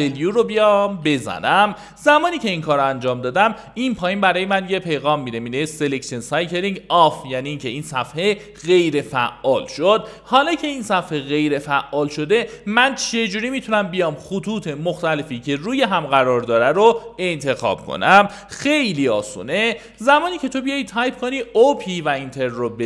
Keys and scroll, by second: 1.0 ctrl+w, 3.0 0, 19.5-20.4 typing, 21.5 space.